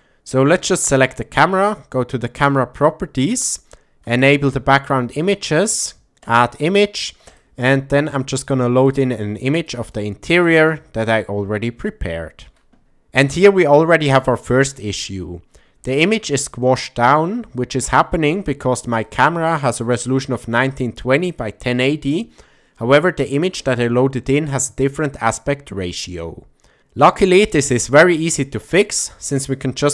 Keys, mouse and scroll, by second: 0.5 click, 2.4 click, 4.2 click, 4.9 click, 6.2 click, 7.3 click, 11.8 shift+middle click, 19.0 click.